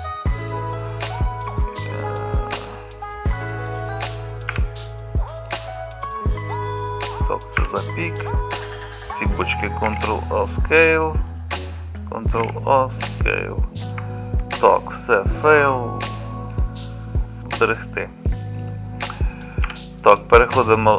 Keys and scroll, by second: 4.6 h, 9.9 ctrl+a, 10.1 h, 12.5 ctrl+a, 14.6 ctrl+a, 19.7 KP_Divide.